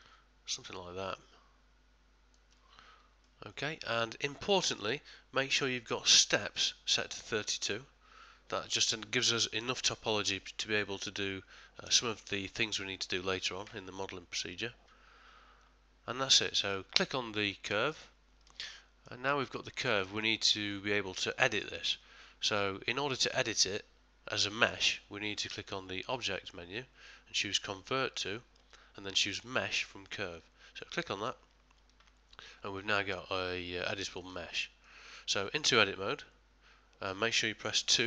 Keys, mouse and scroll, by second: 3.3 middle click, 17.9 click, 18.7 middle click, 19.3 ctrl+middle click, 20.2 shift+middle click, 20.7 middle click, 21.5 middle click, 22.5 middle click, 26.1 click, 32.6 middle click, 34.3 ctrl+middle click, 34.9 middle click, 35.7 Tab.